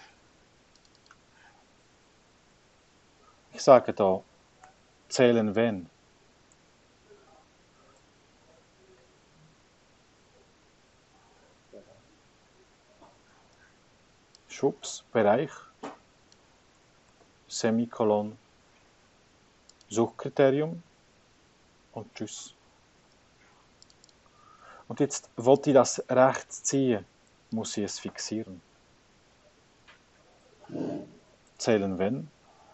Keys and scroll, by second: 3.9 shift+0, 4.8 z, 5.4 \, 6.0 h, 6.6 Tab, 17.2 ,, 21.2 9, 22.0 Return, 28.5 F4, 28.8 Return, 31.0-32.6 typing.